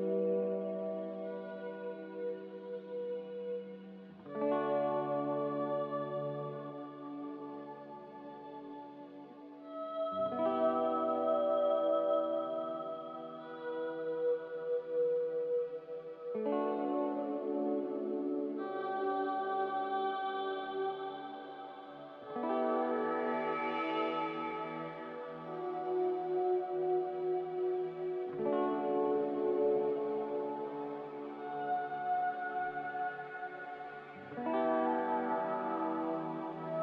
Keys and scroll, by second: 16.8 ctrl+j, 29.5 q.